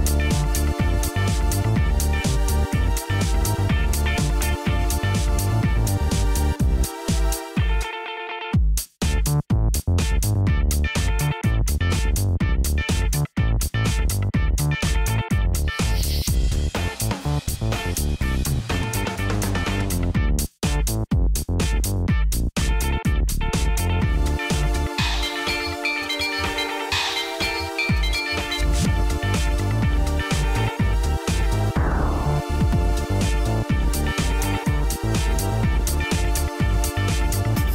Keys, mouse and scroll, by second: 2.2-4.4 typing, 9.2-12.5 typing, 16.3 Return, 20.3-24.8 typing, 31.4 Return.